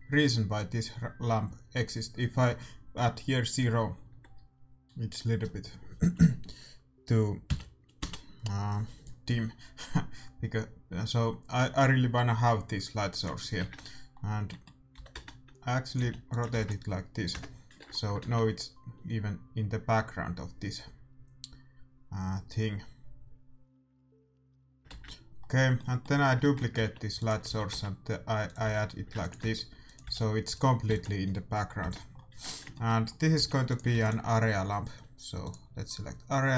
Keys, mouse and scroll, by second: 4.5-5.7 drag, 13.8-14.9 drag, 13.9 shift+z, 14.9 r, 16.0 g, 16.5 ctrl+s, 17.3 KP_0, 17.8-19.7 middle drag, 19.5 shift+z, 25.4 shift+z, 26.7 shift+d, 27.4 r, 28.6 g, 29.4 r, 30.0 g, 30.8 ctrl+s, 31.8 KP_0, 32.1 middle click, 33.1-35.0 middle drag, 33.3 g, 33.9 ctrl+s, 35.4-36.5 drag.